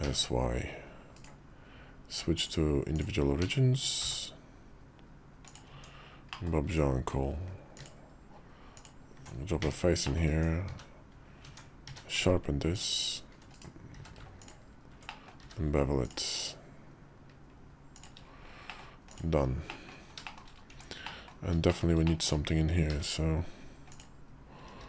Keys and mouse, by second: 2.1 click, 3.2 s, 5.4 Tab, 6.1 middle click, 6.4 Tab, 7.5 alt+click, 9.4 f, 9.8 middle click, 10.5 Tab, 10.5 q, 11.2 Tab, 11.6 q, 13.7 q, 14.8 click, 15.2 q, 18.5 middle click, 18.9 click, 19.5 middle click, 20.0 shift+middle click, 20.5 Tab, 20.8 middle click, 21.4 shift+middle click, 21.8 middle click, 22.7 i, 24.4 e.